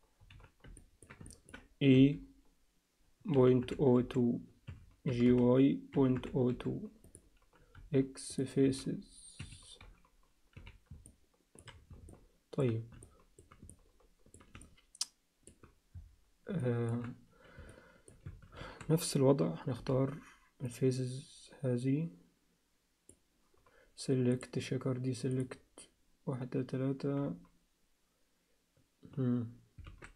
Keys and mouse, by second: 0.3 z, 0.8 ctrl+alt+middle click, 1.2 alt+shift+middle click, 1.4 alt+shift+click, 2.0 e, 5.1 g, 7.8 x, 8.6 z, 10.7 z, 11.0 alt+middle click, 12.1 alt+middle click, 13.0 alt+shift+middle click, 13.7 alt+middle click, 14.6 alt+shift+middle click, 16.6 alt+shift+middle click, 17.7 alt+middle click, 18.3 a, 19.8 b, 24.4-25.4 drag, 29.9 alt+a.